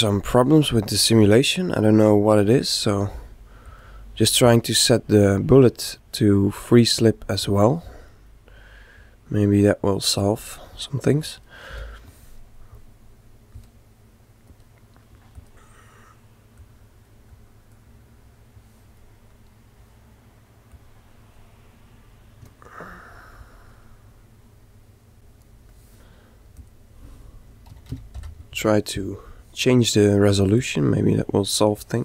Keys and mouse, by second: 3.6-5.9 drag, 8.9-12.1 right drag, 11.7 a, 14.4-19.1 drag, 19.3-20.7 right drag, 22.5 click, 26.6 click, 30.6-32.0 drag.